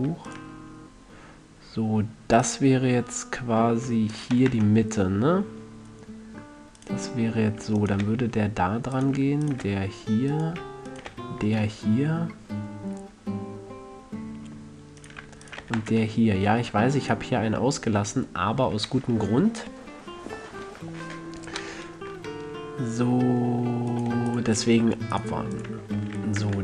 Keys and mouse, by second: 4.7 f, 4.9 a, 5.3 click, 5.3 middle click, 5.5-5.9 drag, 5.9 middle click, 6.1 click, 6.2 middle click, 6.3 click, 7.1-7.4 right drag, 7.4-10.0 middle drag, 8.4 f, 10.0 f, 11.5 f, 13.7-14.1 middle drag, 15.9 f, 16.1 a, 18.4-22.9 middle drag, 26.3 f, 26.5 a.